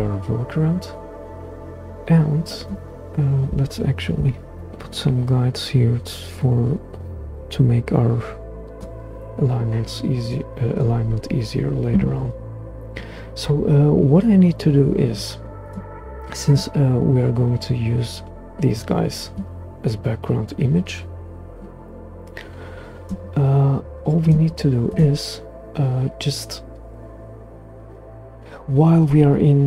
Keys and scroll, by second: 4.1 super+g.